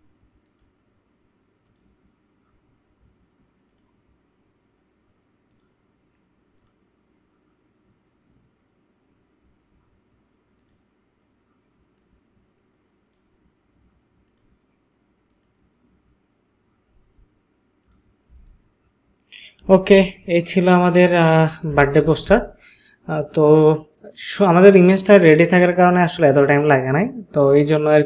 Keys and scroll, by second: 18.4 ctrl+space, 19.9 ctrl+space.